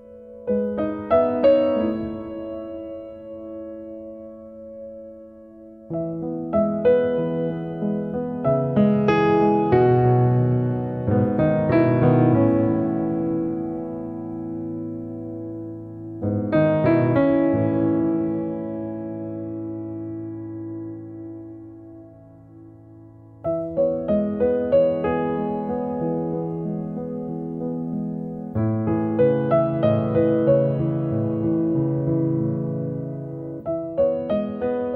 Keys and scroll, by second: 2.3 space, 4.7 e, 14.9 p, 17.1 2, 17.5 Return, 23.9 f, 26.1 2, 26.6 Return, 29.1 space, 31.1 p, 32.3 p, 32.5 0, 33.0 Return.